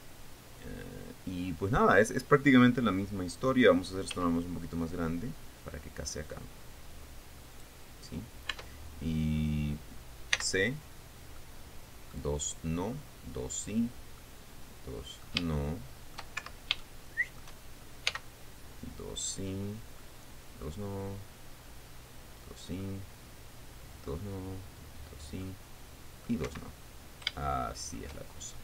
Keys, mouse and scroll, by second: 4.6 s, 8.1 click, 9.1 Tab, 10.0 middle click, 10.0-10.4 scroll up 1, 10.9 c, 12.0 middle click, 14.8-16.0 middle drag, 16.1 shift+middle click, 17.0 shift+Escape, 17.4 shift+middle click, 18.6 c, 20.6 middle click, 23.4-24.8 middle drag, 26.0 middle click, 27.0 Escape, 27.4-27.8 scroll down 1, 28.0 shift+middle click.